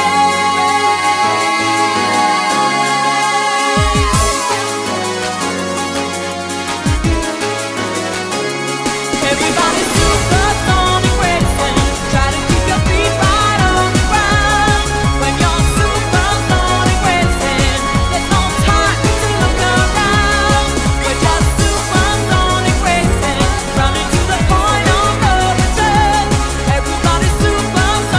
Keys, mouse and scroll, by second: 2.1 click, 11.3 scroll, 11.4 scroll down 7, 14.5 click, 16.8 click, 19.7 ctrl+right click, 26.6 ctrl+right click, 27.3 shift+right click.